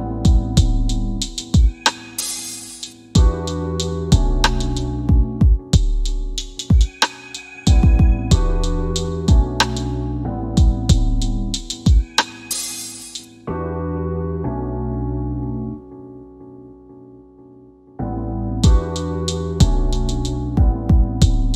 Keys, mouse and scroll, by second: 12.8 click, 13.7-14.3 scroll down 1, 14.3 click, 20.6 click.